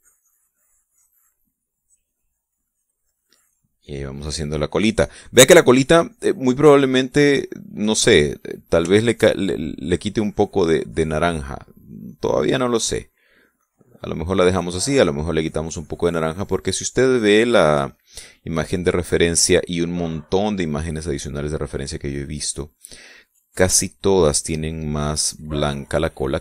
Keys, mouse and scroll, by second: 0.8-2.4 drag, 2.6-4.2 drag, 4.3-6.5 drag, 6.7-9.0 drag, 9.1-9.7 middle drag, 9.8-10.9 shift+middle drag, 11.5 click, 12.7 click, 13.7-15.3 drag, 15.7-17.4 drag, 17.6-19.2 drag, 19.5-20.7 drag, 20.8-22.3 middle drag, 22.7-24.3 drag, 24.5 click, 25.4 middle click, 26.1 click.